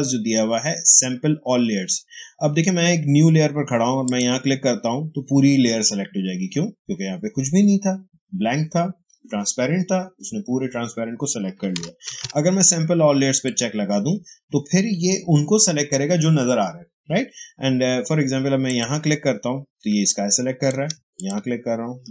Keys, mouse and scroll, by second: 3.9 click, 5.5 click, 11.6 click, 12.0 ctrl+d, 13.2 click, 18.6 click, 19.8 space, 20.0 click, 20.4 space, 21.1 shift+click.